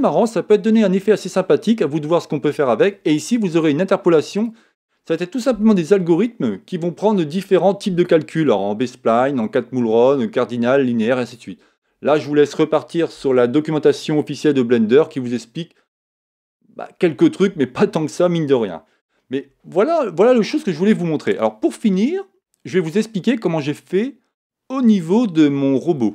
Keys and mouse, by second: 4.4 click.